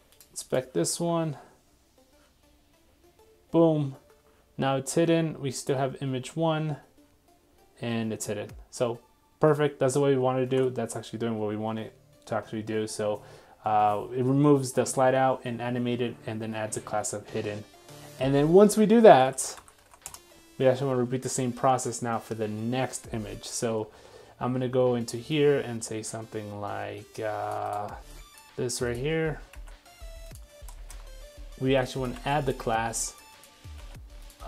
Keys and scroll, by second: 10.5 super+Tab, 28.3 super+c, 30.0 super+v, 32.1 super+c, 33.9 super+v.